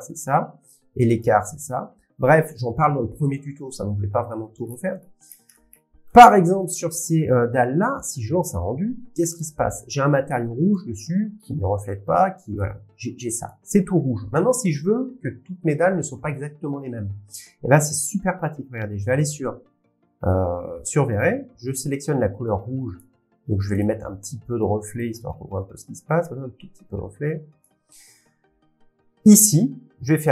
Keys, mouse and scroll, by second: 1.2 click, 5.2-7.4 scroll, 6.0 middle click, 9.4-10.6 click, 9.4 scroll, 13.4 click, 15.1 click, 19.3 click, 21.2 click, 23.0 click, 25.0 click, 27.6 click.